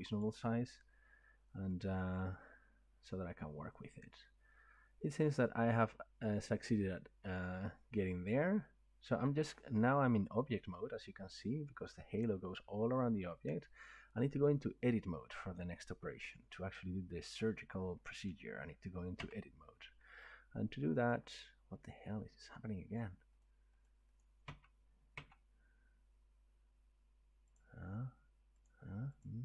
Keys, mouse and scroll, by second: 0.2 click, 1.4 scroll, 5.6 middle click, 19.2 Tab, 21.1 click, 21.9 click, 23.0 click, 23.4 click, 23.9 click, 24.2 click, 24.5 Tab, 25.2 Tab, 27.6 click, 28.8 click, 29.3 click.